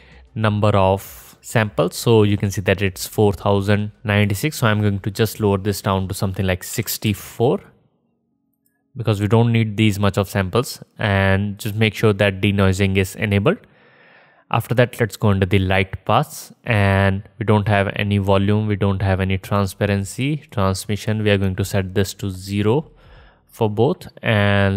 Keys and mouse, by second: 5.3-9.7 middle drag, 9.7-12.5 drag, 12.5-24.7 middle drag.